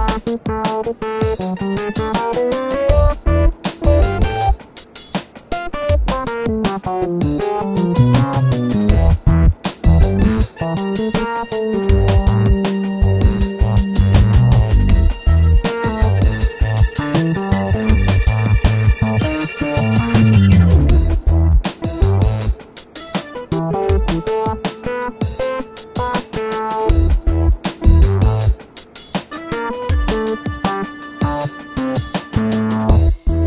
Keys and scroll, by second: 0.2 super+t, 0.9 Return, 1.8 super+t, 2.6 Return, 3.1 super+-, 4.5 Return, 5.5 super+z, 6.8 b, 9.5 v, 10.0 super+z, 11.4 super+t, 13.4 Return, 14.0 super+-, 15.2 b, 16.8 super+v, 17.7 alt+t, 18.7 Return, 19.6 super+t, 22.7 Return, 25.7 alt+t, 28.6 shift+Return, 29.5 super+t, 30.8 Return, 32.8 m.